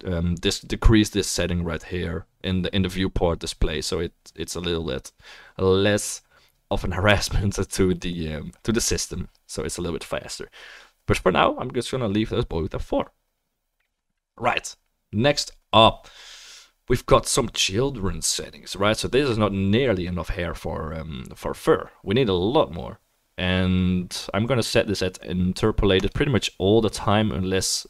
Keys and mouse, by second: 19.0-26.1 drag.